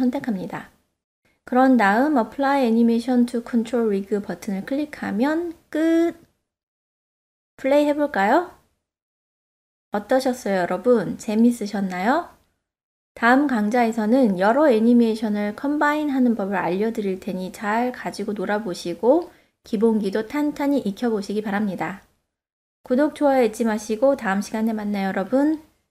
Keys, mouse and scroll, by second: 3.6 drag, 6.5 click, 7.1-8.7 middle drag, 8.8 space, 11.6 space, 13.9-16.8 middle drag, 17.9-23.5 drag, 20.9 e, 24.6-25.8 middle drag.